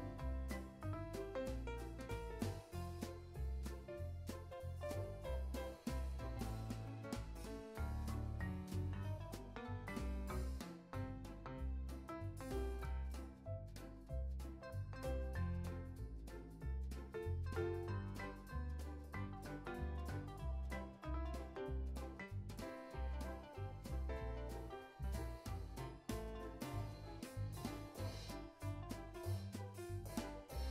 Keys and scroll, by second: 4.7 super+c, 6.4 super+v, 8.0 alt+w, 8.8 x, 10.5 super+v, 11.9 super+v, 12.2 super+s, 16.5 super+g, 18.3 x, 20.9 o, 21.3 z, 23.3 i, 23.8 super+s, 25.4 super+g, 27.6 alt+x, 30.4 o.